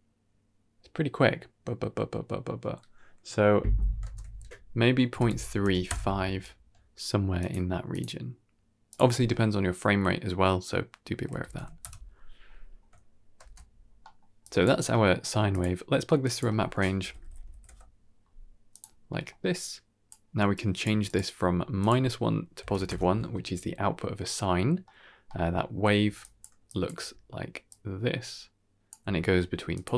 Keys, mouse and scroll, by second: 4.0 shift+space, 4.7-5.8 drag, 7.3 click, 7.8 click, 8.8-11.7 drag, 13.3 shift+space, 13.7-14.0 scroll down 2, 13.9 middle click, 14.3 click, 14.8 middle click, 15.2 g, 16.1-18.7 drag, 18.9 scroll down 2, 19.0 middle click, 19.5 click, 20.4 drag, 20.7 g, 21.2-21.9 scroll up 3, 21.7-22.8 drag, 24.7 middle click, 25.1 middle click, 25.4 middle click, 25.9-27.6 typing, 26.1 click, 26.5 click, 27.6-28.8 drag, 28.8 d, 29.4 d, 29.6 click, 29.9 click, 29.9 d.